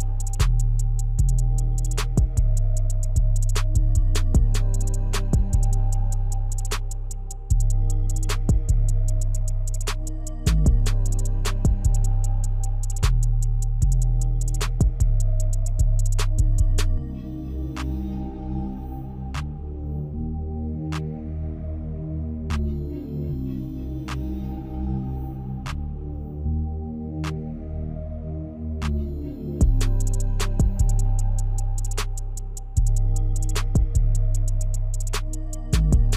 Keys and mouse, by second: 1.5 alt+shift+click, 4.0 shift+click, 4.8 shift+click, 6.1-7.2 middle drag, 8.3 shift+click, 8.9 shift+click, 9.5 ctrl+z, 9.7 ctrl+z, 9.9 ctrl+z, 11.4 shift+click, 11.8 middle click, 12.2 shift+click, 13.2 middle click, 13.5 shift+click, 14.2 shift+click, 14.5 middle click, 15.6 shift+click, 16.4 middle click, 17.0 shift+click, 17.9 middle click, 18.5 shift+click, 18.8 shift+click, 19.7 shift+click, 20.7 middle click, 21.7 shift+middle click, 23.6 i, 25.2 ctrl+z, 26.5-27.9 drag, 28.8-31.2 drag, 32.4 click, 33.7 Tab, 34.8-36.1 middle drag.